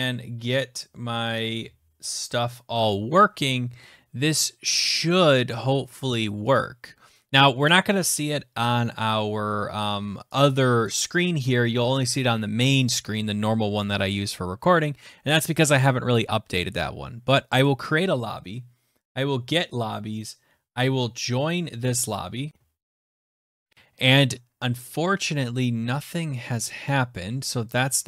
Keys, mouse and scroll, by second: 5.0 click, 6.5 click, 10.8 click, 17.6 click, 27.7 click.